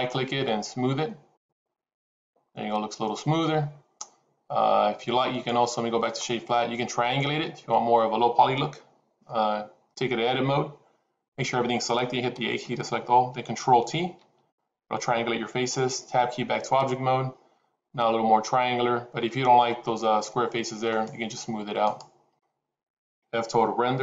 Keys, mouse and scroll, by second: 5.2-6.5 right drag, 7.4 Tab, 12.5 a, 12.9 a, 14.3 ctrl+t, 16.4 Tab, 20.7-22.3 right drag.